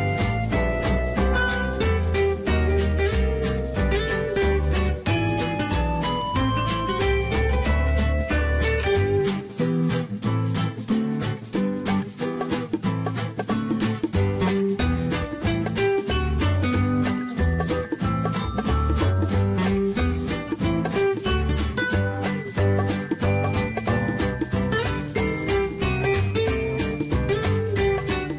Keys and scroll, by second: 9.5 Escape, 12.4-13.8 typing.